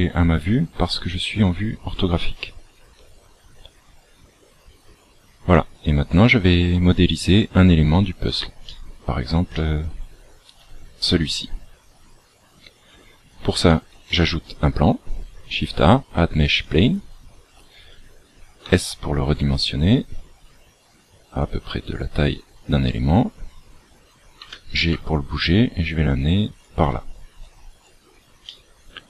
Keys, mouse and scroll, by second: 5.5 click, 6.7-7.4 scroll up 5, 7.9-8.7 scroll up 1, 8.7 shift+middle click, 14.0 shift+a, 17.1 scroll down 1, 18.6 s, 24.3 g, 27.3-27.9 scroll up 7, 28.4 shift+middle click.